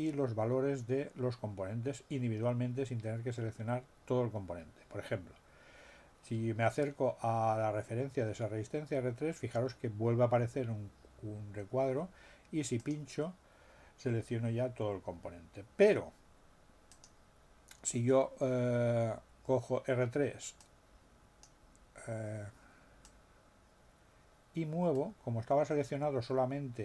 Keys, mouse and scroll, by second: 12.8 click, 16.8 click, 20.6 click, 23.0-26.8 drag.